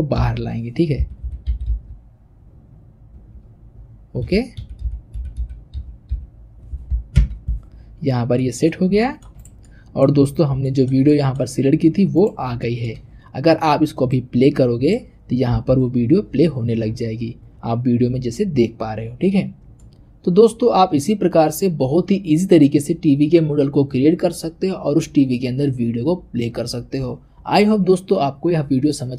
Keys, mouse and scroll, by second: 7.9-8.4 scroll down 3, 8.4-9.3 middle drag, 9.3 click, 9.6-10.2 middle drag, 10.2-10.6 scroll up 1, 10.6-12.1 shift+middle drag, 12.1 click, 12.6-14.0 shift+middle drag, 14.0-18.1 drag, 19.8-20.6 middle drag.